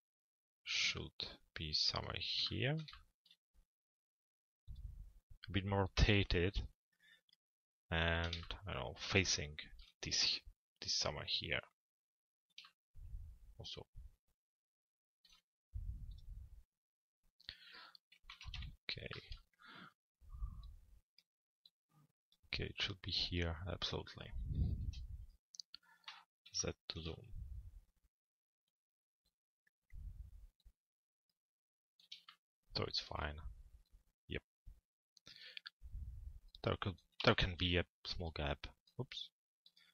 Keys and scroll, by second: 17.9 f, 18.5 z, 24.4 p, 26.0 z.